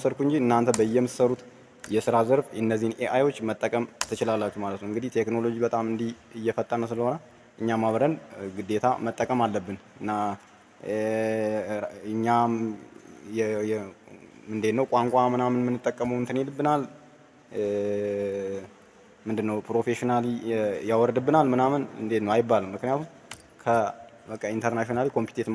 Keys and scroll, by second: 1.7 ctrl+v, 23.2 ctrl+c.